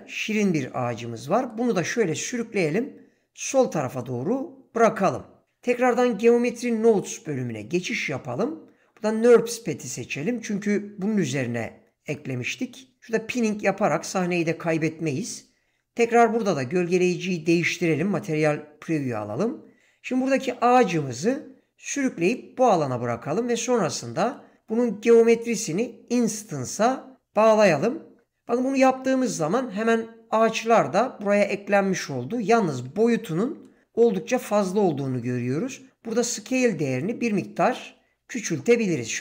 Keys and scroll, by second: 1.2 g, 16.4 z.